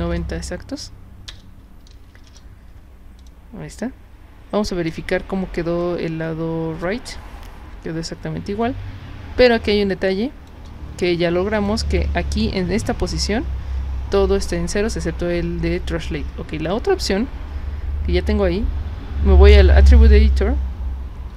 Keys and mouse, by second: 1.3 BackSpace, 3.2 click, 4.9 space, 5.8-6.8 drag, 8.6 space, 9.4-10.5 drag, 11.5 click, 19.5 click.